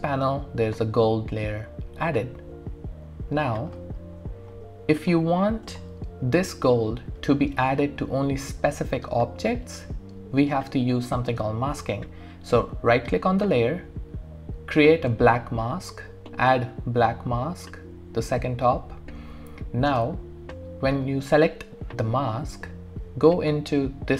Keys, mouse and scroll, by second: 3.0 alt+click, 4.0 alt+middle click, 4.5 alt+click, 5.5-5.9 scroll up 1, 5.9-7.7 scroll down 1, 13.0 right click, 15.4 click, 15.9 typing, 21.0 click, 21.0 typing.